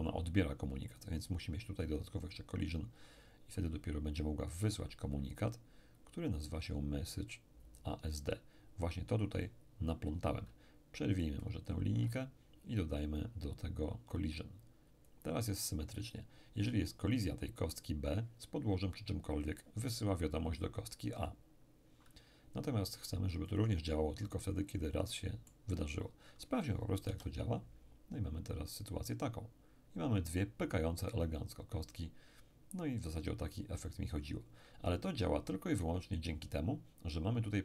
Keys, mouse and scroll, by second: 0.9 click, 2.2 click, 6.4 click, 11.2-12.6 ctrl+drag, 12.9-16.0 ctrl+drag, 23.5 click, 24.5-25.1 scroll up 1, 25.1-26.5 middle drag, 27.1 p.